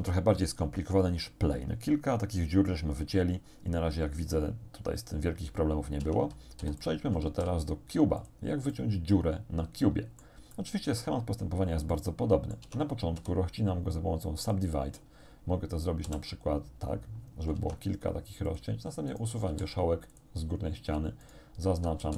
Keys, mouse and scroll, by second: 6.0 Tab, 6.6 x, 6.8 click, 7.3 shift+a, 8.2 click, 8.8 middle click, 9.5 click, 10.6 shift+click, 10.8 shift+middle click, 11.2 shift+scroll down 2, 12.0 click, 12.7 Tab, 13.2 w, 14.4 click, 16.1 shift+r, 17.6 ctrl+Tab, 18.5 click, 19.1 right click, 19.5 x, 20.2 click, 21.3 alt+shift+right click.